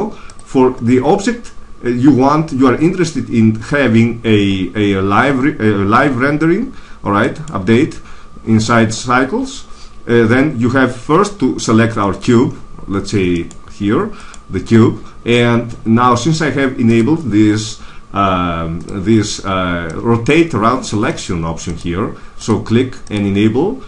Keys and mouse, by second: 7.2-8.9 right drag, 13.3-16.0 right drag, 16.8-18.6 drag.